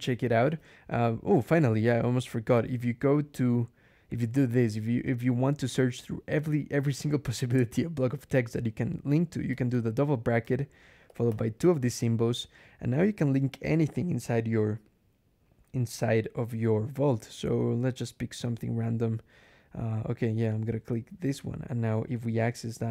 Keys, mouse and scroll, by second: 1.1 click, 2.4 i, 9.4 [, 10.9 shift+6, 12.2-12.9 scroll down 4, 13.3 scroll down 2, 13.4-14.1 scroll up 2, 14.1 scroll up 2, 16.4 scroll down 2, 17.3-17.8 scroll down 2, 18.2 scroll up 2, 20.4 click, 22.2 ctrl+click.